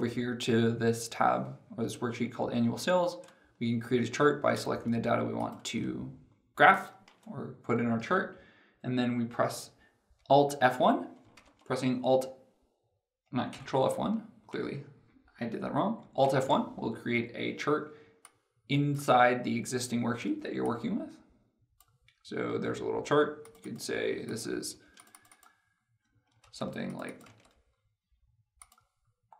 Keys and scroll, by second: 11.1 ctrl+F1, 16.1 alt+F1, 26.1 ctrl+a.